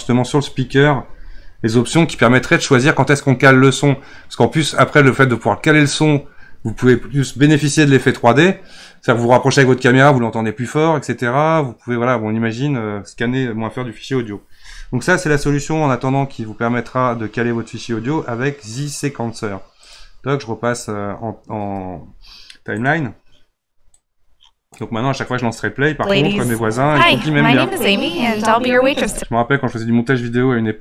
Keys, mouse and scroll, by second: 19.8-25.8 drag, 25.8 space, 29.0 space.